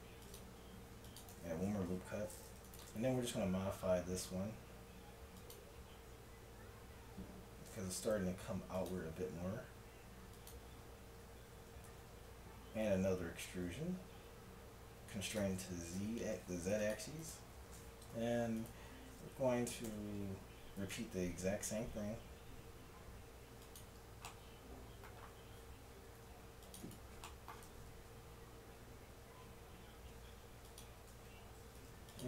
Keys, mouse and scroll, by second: 0.8 ctrl+r, 2.8 click, 3.4 s, 3.9 click, 8.1 g, 9.1 s, 11.9 e, 16.0 ctrl+Tab, 18.2 e, 19.9 s, 24.3-26.1 middle drag, 26.1 ctrl+r, 27.7 ctrl+b, 31.2 ctrl+Tab.